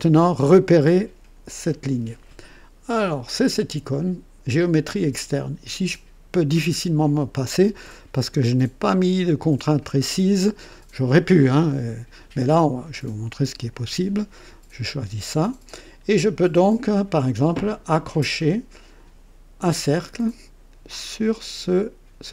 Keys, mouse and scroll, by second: 5.1 click, 13.5 click, 19.6 click.